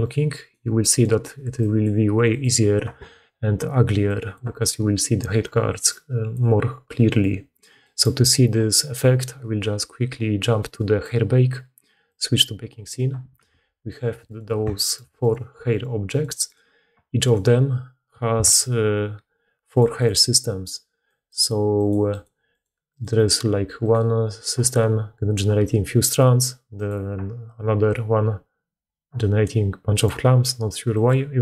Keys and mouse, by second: 0.4 d, 0.5 d, 0.6-14.5 drag, 0.6-3.5 middle drag, 0.6-3.5 right drag, 1.3-2.5 d, 13.4 Tab, 15.1 click, 15.4 g, 15.5 click, 16.3 click, 17.1 click, 18.2 a, 19.7 middle click, 20.0 middle click, 21.1 click, 23.7 click, 26.7 click, 29.8 click, 30.8 click.